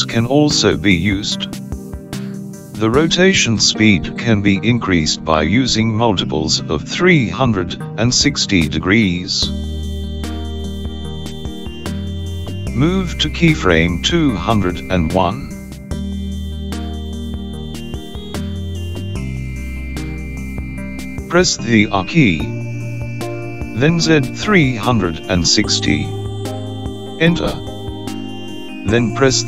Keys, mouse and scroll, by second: 15.4 click, 23.3 r.